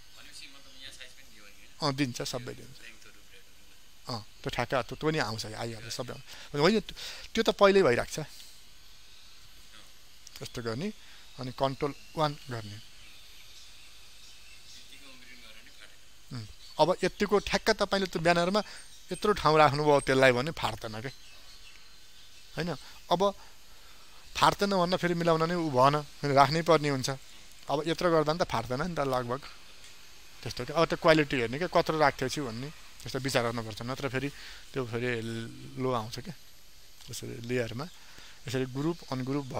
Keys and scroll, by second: 10.1 ctrl+0, 12.1 ctrl+1, 26.9 ctrl+space, 32.1 ctrl+0.